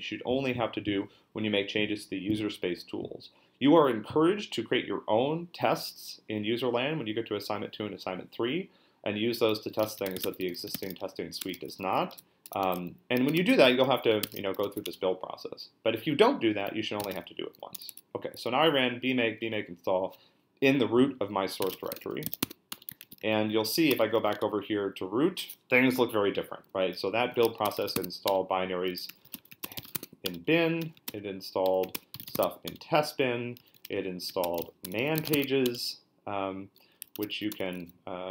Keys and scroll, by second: 9.6-11.5 typing, 12.6-15.0 typing, 16.7-18.3 typing, 21.4-24.7 typing, 23.0 ctrl+l, 27.2-35.7 typing, 36.8-37.8 typing.